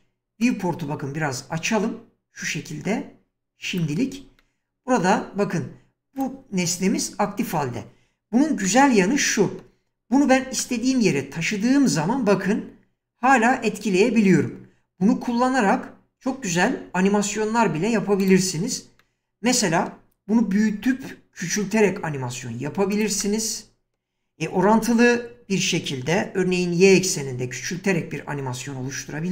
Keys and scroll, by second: 10.2 g, 20.4 s, 24.7 s, 26.4 y.